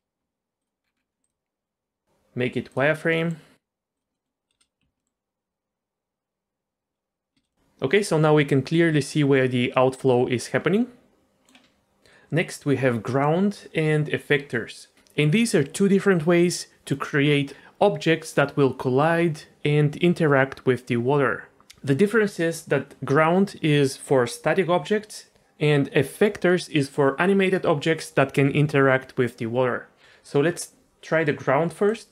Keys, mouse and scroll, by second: 0.6 click, 0.8-1.4 scroll down 3, 1.2-2.8 drag, 3.1 middle click, 3.9 click, 4.1 middle click, 4.5 space, 4.8 z, 5.0 middle click, 7.3 space, 7.5 click, 7.5 middle click, 10.2 click, 10.3 middle click, 31.8 click.